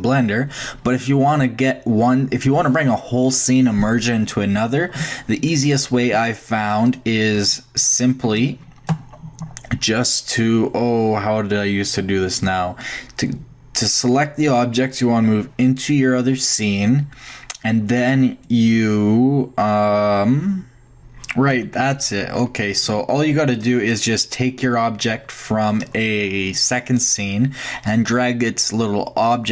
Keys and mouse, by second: 1.7 shift+click, 6.8-10.4 shift+drag, 21.5 Tab, 23.5-25.4 drag.